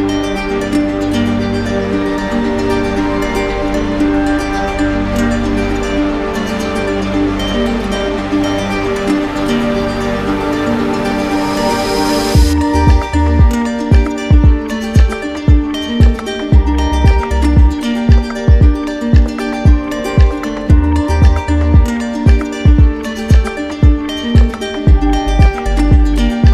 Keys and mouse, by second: 0.3-1.4 ctrl+drag, 1.4 right click, 2.5 right click, 6.5 click, 7.9 right click, 10.9 click, 11.8 shift+right click, 15.0 click, 16.5 right click, 17.4 alt+right click, 20.2 alt+right click, 20.5 ctrl+click, 22.6 ctrl+click, 25.3 ctrl+z.